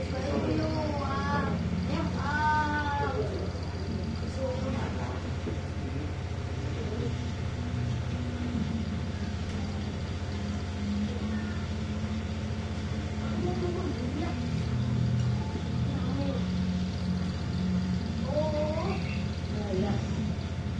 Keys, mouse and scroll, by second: 0.8 click, 2.0 click, 3.2 click, 5.0 click, 6.4 shift+click, 7.9 click, 9.0 click, 10.1 shift+click, 11.3 click, 12.9 click, 13.9-14.4 ctrl+scroll up 1, 15.0-15.4 ctrl+scroll up 1, 16.7 click, 17.8 click, 19.0 click, 20.3 click.